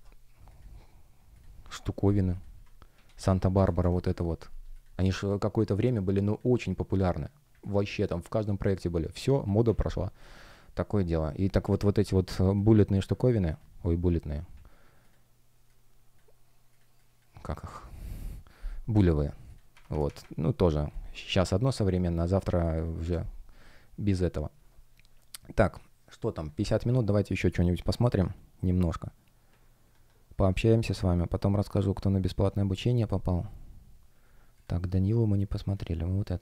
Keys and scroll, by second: 3.3 Tab, 3.9 Return, 9.5 Delete, 19.6 shift+Up, 22.9 Delete.